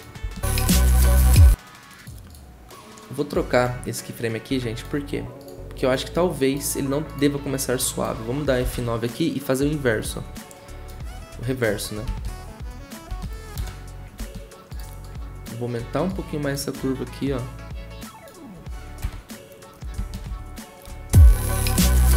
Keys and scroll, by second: 8.6 F9, 13.6 0, 19.0 0, 20.3 ctrl+w, 20.9 0.